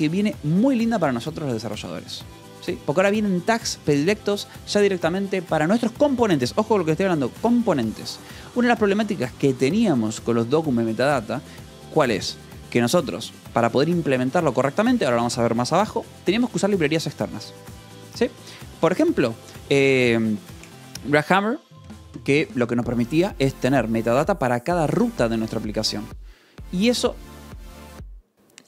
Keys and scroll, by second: 2.7 Escape.